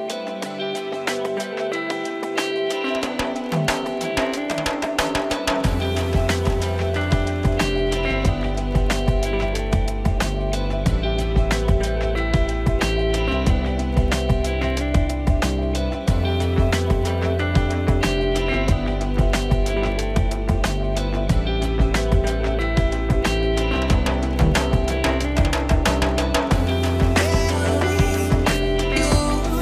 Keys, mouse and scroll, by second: 0.3-1.6 drag, 1.5-3.2 middle drag, 3.2-4.2 drag, 4.5 middle click, 5.1-6.2 drag, 6.4-7.6 middle drag, 7.6-8.3 drag, 8.6 click, 8.6 f, 9.5-10.5 middle drag, 10.4 click, 11.3-12.4 middle drag, 12.0 click, 13.0 click, 13.4 middle click, 13.9 click, 14.9-16.8 middle drag, 16.6 f, 16.8-17.6 drag, 18.9-19.9 middle drag, 19.8 click, 20.4 alt+h, 20.6 middle click, 21.0-22.4 drag, 22.4-23.6 middle drag, 23.6-24.4 drag, 24.6-26.3 middle drag, 26.1 click, 27.2 middle click, 28.0 middle click, 28.8 f, 29.0-29.6 drag.